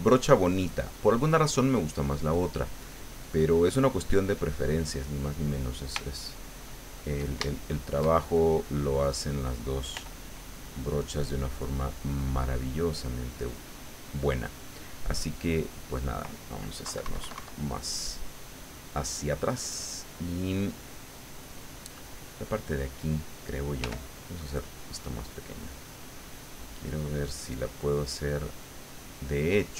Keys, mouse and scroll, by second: 2.8-4.6 drag, 4.7-5.7 middle drag, 5.8-7.3 shift+middle drag, 7.5 shift+middle click, 8.3 shift+click, 9.9 f, 10.9 click, 11.7 click, 12.8 click, 13.6 click, 14.3 click, 15.2 click, 15.9 click, 16.8 KP_Subtract, 18.0-19.8 middle drag, 19.9 middle click, 21.7 click, 22.4 click, 23.8 f, 24.6 click, 25.1 click, 25.7 click, 27.7-29.7 middle drag.